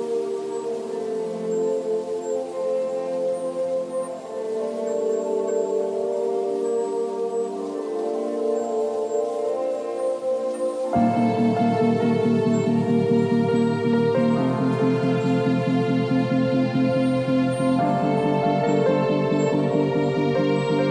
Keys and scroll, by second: 2.5 alt+shift+s, 3.3 ctrl+t, 10.6 b, 11.9 [, 14.4 x, 15.3 [.